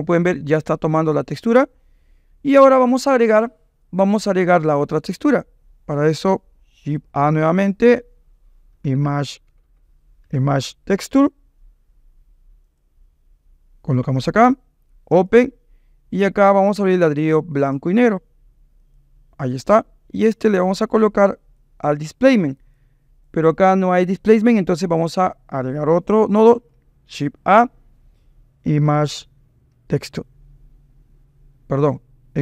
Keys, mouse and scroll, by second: 0.0-1.5 drag, 5.4 click, 7.2 shift+a, 9.6 BackSpace, 15.1-17.6 drag, 21.2-22.8 drag, 23.2 click, 26.5 shift+a.